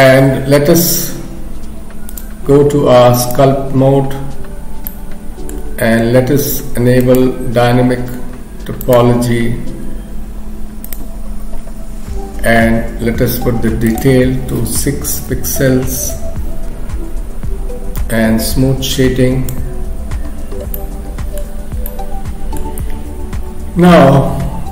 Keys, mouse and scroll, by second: 2.1 click, 4.9 middle click, 7.0 click, 10.9 click, 20.7 middle click, 21.9 middle click.